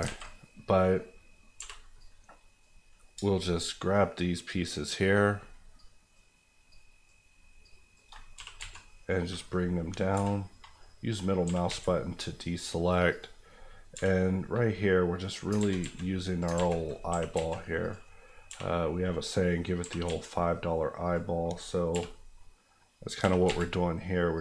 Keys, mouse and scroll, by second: 0.0 alt+a, 1.5 b, 1.9 click, 3.2 shift+click, 3.8 click, 4.4 shift+Left, 6.1 shift+Left, 6.7 shift+click, 7.6 shift+Left, 8.1 click, 8.3 g, 8.5 z, 9.2 click, 10.1 b, 10.3 scroll up 1, 10.7 middle click, 11.4 g, 11.6 z, 13.1 click, 13.9 b, 14.3 middle click, 15.5 ctrl+middle click, 15.6 ctrl+z, 17.1 g, 17.3 z, 17.8 click, 18.4 b, 19.0 middle click, 19.8 g, 20.0 z, 21.0 click, 21.9 b, 22.3 middle click, 23.2 g, 23.4 z, 24.3 click.